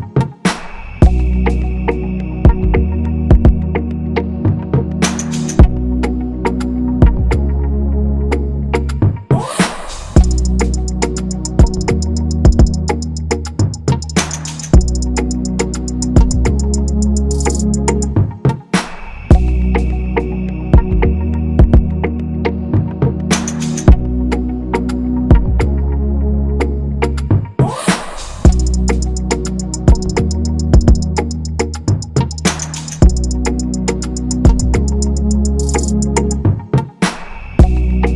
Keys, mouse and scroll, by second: 2.3-3.8 scroll, 6.7 ctrl+0, 12.7 ctrl+=, 13.2 scroll, 13.4-14.7 scroll down 1, 14.8 ctrl+=, 14.9 ctrl+=, 15.0 ctrl+=, 15.5 shift+click, 16.8 ctrl+g, 17.1 ctrl+-, 17.5-17.8 scroll, 18.4 ctrl+-, 19.1-20.8 scroll, 23.3 ctrl+g, 25.2-27.3 scroll, 33.3-34.0 typing, 36.5 ctrl+f.